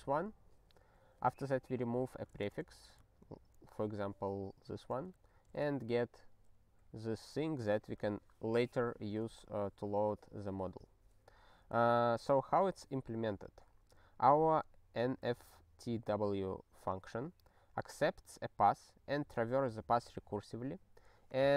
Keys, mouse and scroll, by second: 10.8 click, 21.3 click.